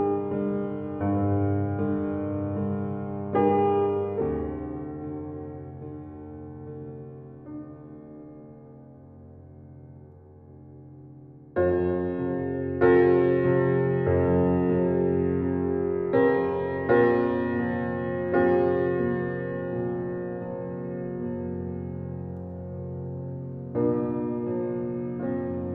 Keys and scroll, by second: 11.7 Right, 14.6 Right, 17.3 Right, 17.6 Right, 18.2 Right, 19.9 Left.